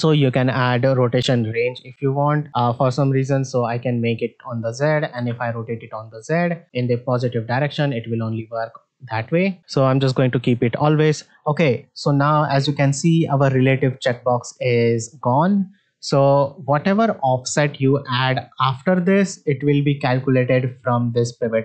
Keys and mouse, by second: 0.0-3.2 drag, 3.9 middle drag, 5.1 r, 9.6 click, 11.0-11.3 middle drag, 11.8 middle drag.